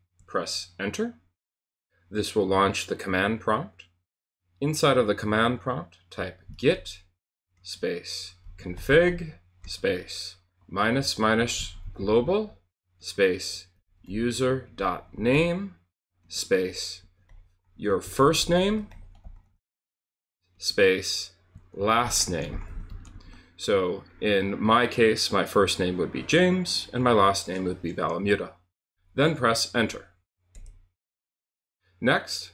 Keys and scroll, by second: 0.1 Return, 5.9-23.6 typing, 30.5 Return, 32.4-32.5 typing.